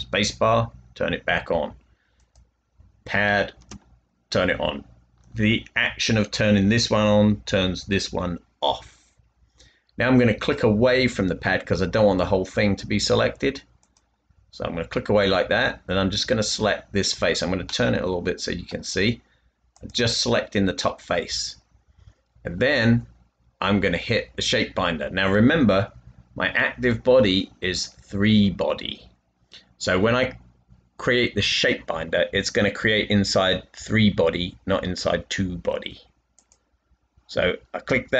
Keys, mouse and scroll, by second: 23.4 typing.